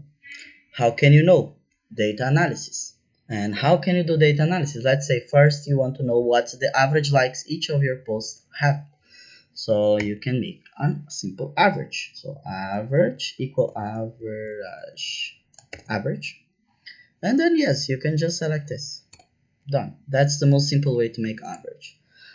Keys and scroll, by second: 9.9 =, 11.9-15.6 typing, 19.0 Return.